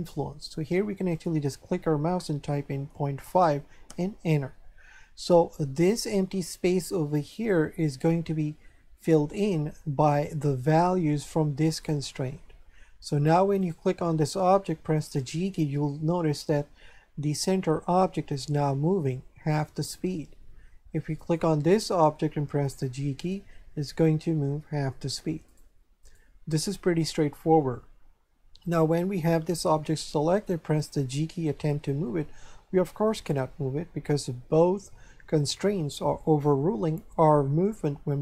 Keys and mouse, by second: 1.1 click, 2.9 KP_Decimal, 3.2 KP_5, 3.9 Return, 3.9 KP_Enter, 13.6 right click, 15.0 g, 19.8 right click, 21.2 right click, 22.5 g, 25.5 right click, 31.1 g, 33.1 right click.